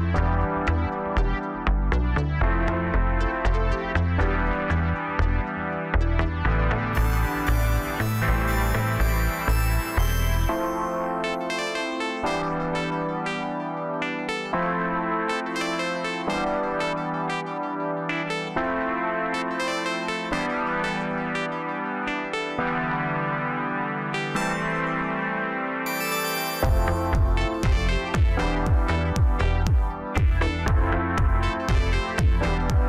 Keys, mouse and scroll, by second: 1.3-2.4 middle drag, 2.4 Tab, 2.7-3.9 scroll up 1, 3.9 KP_3, 4.5 scroll up 2, 5.3 g, 9.4-9.7 scroll down 1, 9.7-11.5 middle drag, 11.5 click, 11.7 click, 12.5 f, 13.1-14.3 middle drag, 14.3 click, 14.5 click, 15.3 f, 16.4 KP_1, 17.6 Tab, 18.3 s, 20.2-21.0 middle drag, 21.0-22.0 scroll up 1, 22.0 ctrl+a, 23.6 Tab, 24.8 click, 25.4 click, 25.9 middle click, 26.8 shift+click, 29.3-29.8 scroll down 2, 29.8 middle click, 30.8-31.3 scroll up 2, 31.7 click, 32.0-32.8 scroll up 1.